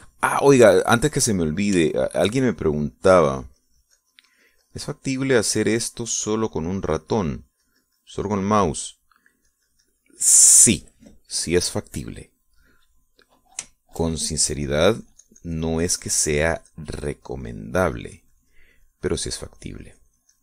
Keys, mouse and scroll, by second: 2.2 click, 3.5 shift+middle click, 4.5-8.4 drag, 8.8-12.6 drag, 15.4 shift+middle click, 16.1-17.5 shift+drag, 19.9-20.4 drag.